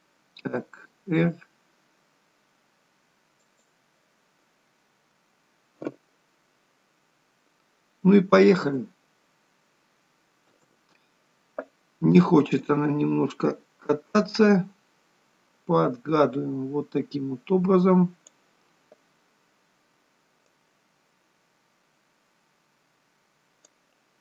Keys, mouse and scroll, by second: 5.6 KP_0, 8.5 space, 10.6 space, 12.6 click, 20.5 click.